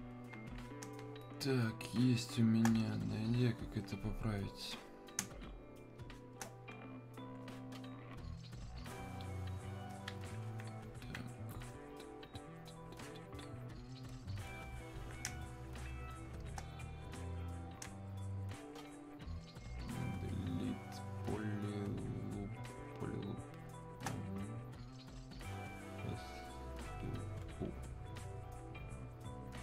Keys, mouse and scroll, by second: 1.0 space, 3.0-5.2 alt+drag, 5.2 space, 5.7 click, 5.7 space, 8.0 click, 10.5-12.6 alt+drag, 12.6-15.2 alt+drag, 15.2 space, 20.2 click, 20.3 space, 23.7 click, 23.7 space, 25.5 click, 29.4 click.